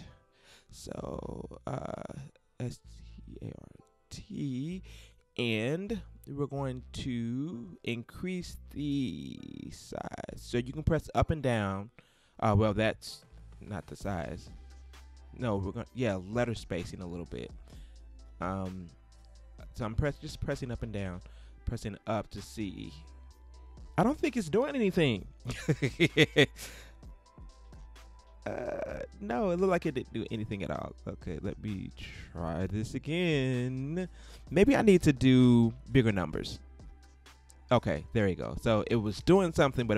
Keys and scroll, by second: 2.3-4.2 typing, 5.0 shift+super+t, 5.2 shift+super+a, 10.4 shift+Up, 17.3 shift+Up, 19.1 shift+Up, 26.5 shift+Return, 35.2 shift+2, 35.8 shift+0, 37.1 shift+Return.